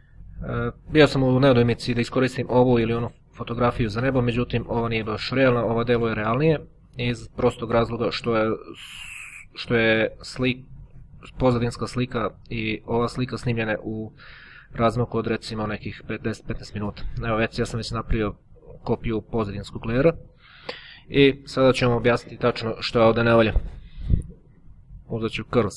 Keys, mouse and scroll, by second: 3.3-4.5 drag, 6.0-7.5 drag, 8.0 click, 10.0 click, 11.5 click, 13.3-15.8 drag, 22.4 click, 24.5 click, 25.1 click.